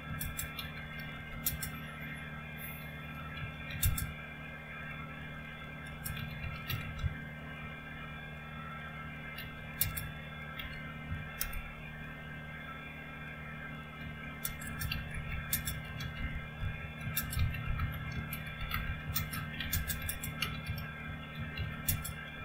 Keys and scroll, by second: 0.0-1.8 typing, 2.9-7.5 typing, 7.5 Return, 9.1-11.0 typing, 11.4 Return, 13.8-22.4 typing.